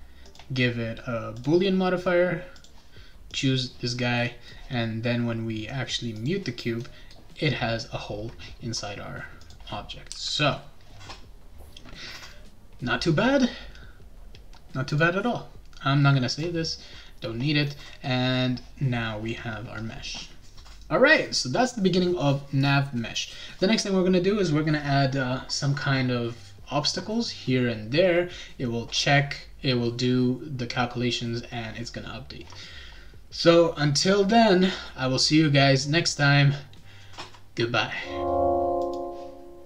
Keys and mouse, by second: 0.2 click, 1.4 click, 2.5 click, 3.3 click, 6.1 click, 9.4 click, 10.1 g, 14.9 click, 16.3 click.